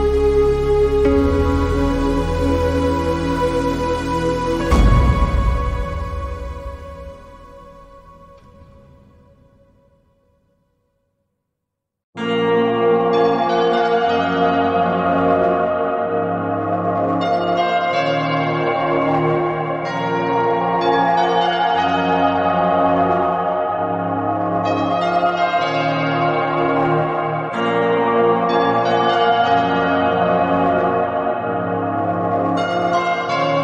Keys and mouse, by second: 0.3 click, 1.3 ctrl+z, 4.8 click, 6.2-6.8 shift+middle drag, 7.7 click, 10.2-13.6 drag, 20.9 click, 32.5 click, 33.2 click.